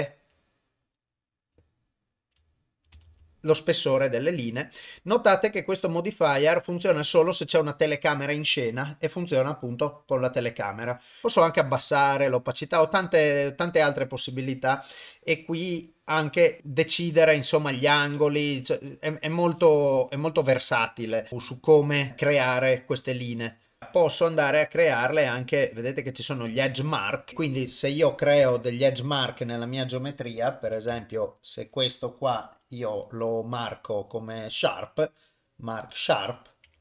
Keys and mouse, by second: 0.7 click, 1.6 ctrl+middle click, 2.4 shift+middle click, 3.1 ctrl+s, 6.8 click, 11.5 click, 13.7 click, 14.8 middle click, 16.5 click, 17.9 KP_1, 18.2 KP_4, 18.6-19.9 drag, 20.4 BackSpace, 21.5 click, 22.1 click, 23.2 middle click, 24.2 middle click, 27.7 click, 28.5 Tab, 30.9 2, 31.1 alt+click, 36.2 right click.